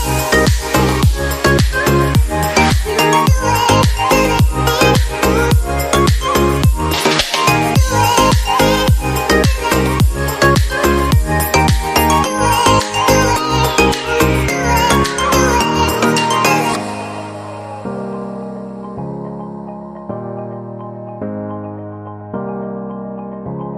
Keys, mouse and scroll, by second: 3.4 right click, 15.2 shift+Page_Up, 23.5 ctrl+z.